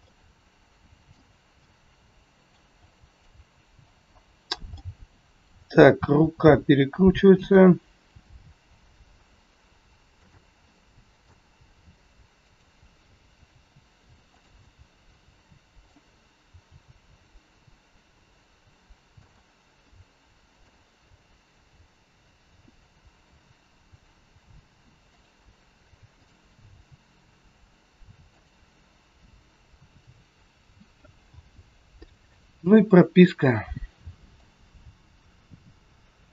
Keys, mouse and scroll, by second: 0.0 middle click, 1.6 middle click, 2.8 middle click, 3.8 click, 5.5 middle click, 5.5-5.8 scroll down 2, 6.1 r, 10.1 g, 10.6 middle click, 11.6 g, 13.2 r, 15.5 middle click, 16.6 g, 20.5 click, 21.8 click, 22.5 g, 26.1 click, 26.7 g, 30.6 a, 31.2 i, 34.3 click.